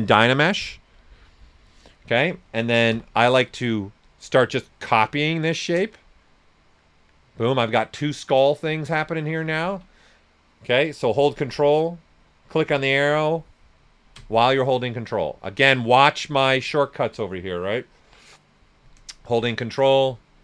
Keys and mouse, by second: 2.9 w, 4.0 alt+click, 4.6-6.1 ctrl+drag, 6.1-9.6 right drag, 9.6 ctrl+z, 12.4-15.5 ctrl+drag, 15.5 ctrl+z, 19.3 ctrl+z.